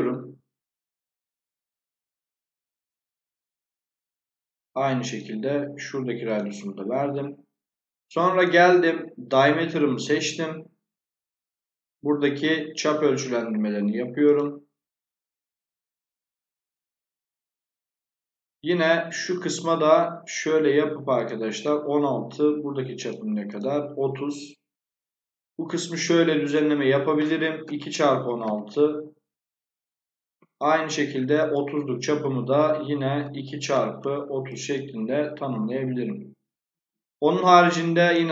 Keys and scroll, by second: 6.8 Escape, 27.6 2, 30.1 Escape, 33.1 2, 33.6 x, 36.6 Escape, 37.6 Escape.